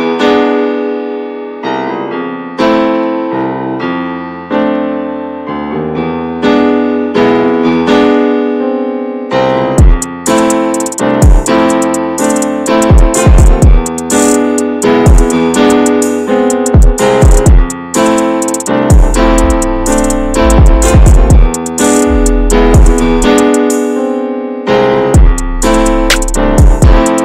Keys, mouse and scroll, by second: 0.2 alt+s, 1.3 2, 1.6 click, 1.9 alt+shift+click, 2.2 middle click, 2.9 alt+shift+click, 3.2 middle click, 4.1 ctrl+b, 6.0 middle click, 6.6 scroll up 1, 6.9 ctrl+z, 7.2-8.2 middle drag, 8.2 alt+s, 9.6 s, 10.5 s, 12.1 ctrl+b, 13.8 ctrl+z, 14.5 ctrl+z, 15.2 ctrl+b, 18.6 scroll down 4, 18.9 middle click, 19.2 Tab, 19.3 click, 19.6-20.3 shift+middle drag, 20.3 ctrl+s, 20.4-20.8 scroll up 1, 20.8 Tab, 21.2 shift+middle click, 21.4 scroll up 1, 21.7 middle click, 22.5 3, 22.5 click, 23.3 alt+middle click, 23.6-24.1 scroll down 2, 24.4 shift+middle click, 24.9 e.